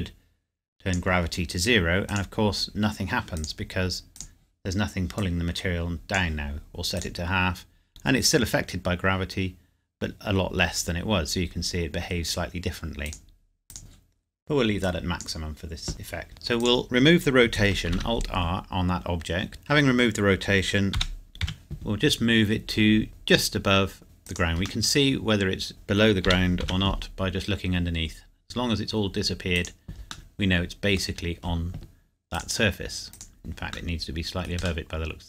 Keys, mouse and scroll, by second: 11.8-13.1 scroll down 1, 13.1 click, 15.9-16.3 scroll up 1, 16.6 click, 17.9 alt+r, 19.5 click, 21.0 g, 21.4 z, 24.2 click, 24.8 middle click, 26.3 g, 26.6 z, 29.5 click, 30.3 middle click, 31.0 scroll down 1, 32.3 click, 33.6 scroll down 1, 34.8 middle click.